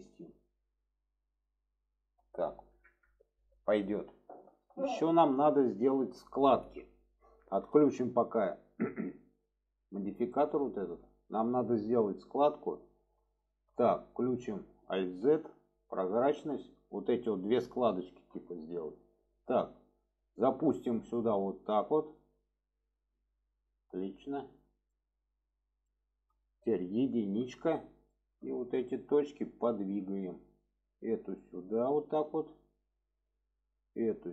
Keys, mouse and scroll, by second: 0.4-1.4 middle drag, 1.9 alt+middle click, 4.8 shift+middle drag, 5.8 shift+middle click, 10.0 click, 11.1 shift+middle click, 12.1 shift+middle click, 13.4 shift+middle click, 15.2 alt+z, 16.2 shift+middle click, 17.9 shift+middle click, 19.2 click, 21.0-23.2 drag, 24.5 click, 25.0 shift+middle drag, 26.0 shift+middle drag, 28.1 middle click, 30.0 click, 30.9 click, 33.7 drag.